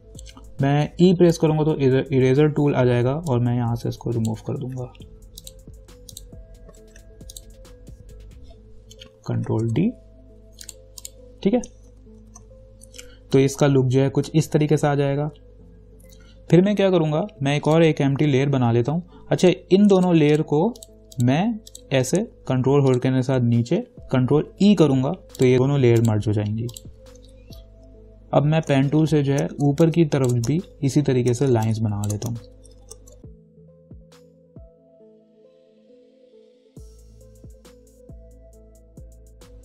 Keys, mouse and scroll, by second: 1.2 e, 3.9 click, 4.9 ctrl+z, 5.6 click, 7.1 ctrl+z, 7.5 click, 9.6 ctrl+d, 10.9 click, 12.1 ctrl+-, 12.4 ctrl+0, 17.9 click, 23.1 ctrl+click, 24.7 ctrl+e, 25.5 click, 28.8 p, 29.1 ctrl+=, 29.9 space, 30.1 click, 30.4 space, 30.8 ctrl+=, 31.7-33.4 typing, 31.9 click, 32.7 ctrl+=, 33.2 click, 33.3 ctrl+=, 33.4 click, 33.6 click, 33.8 ctrl+click, 34.2 ctrl+click, 34.6 right click, 34.8 click, 35.1 right click, 35.2 click, 35.4 ctrl+-, 35.6-37.5 typing, 35.6 click, 35.8 ctrl+j, 36.0 ctrl+-, 36.1 ctrl+t, 36.2 right click, 36.3 click, 36.4 click, 36.6 shift+click, 36.8 click, 36.9 shift+click, 37.4 ctrl+=, 37.5 click, 37.7 shift+click, 38.0 Up, 38.2 click, 38.5 shift+click, 39.2 ctrl+-, 39.3 ctrl+0.